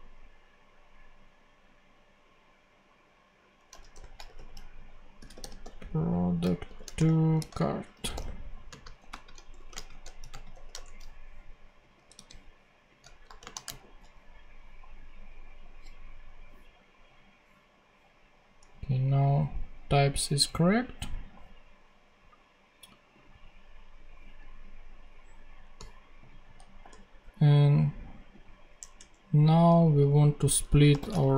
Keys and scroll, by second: 3.6-10.9 typing, 12.0 super+c, 12.9 shift+super+c, 13.1 shift+;, 13.3 shift+space, 13.6 shift+super+v, 14.4 super+v, 28.7 Tab, 30.9 f, 31.0 space, 31.1 shift+9.